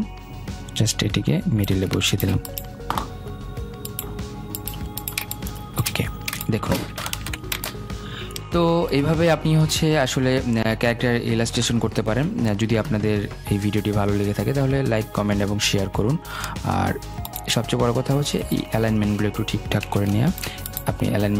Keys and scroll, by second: 19.9 ctrl+g.